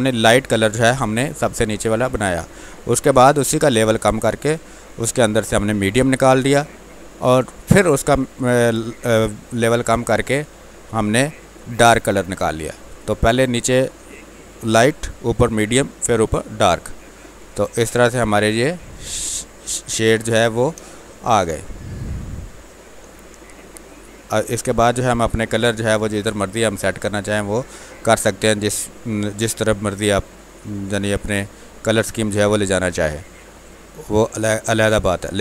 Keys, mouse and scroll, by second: 4.9-9.3 drag, 15.5 click, 16.6-18.9 alt+drag, 19.8 space, 20.0 click, 20.3 space, 23.0 space, 23.4 alt+click, 32.6-35.4 drag.